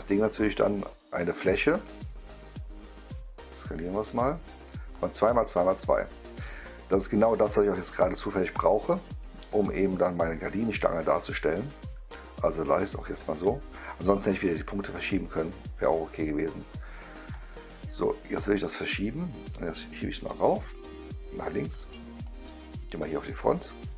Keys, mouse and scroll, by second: 0.4-0.9 right drag, 1.2 click, 1.8 click, 3.7 click, 4.6-5.2 right drag, 12.4 click, 12.8-13.7 right drag, 16.8 click, 17.2 click, 18.5 click, 19.3-20.4 drag, 21.6-22.3 drag, 23.2 click.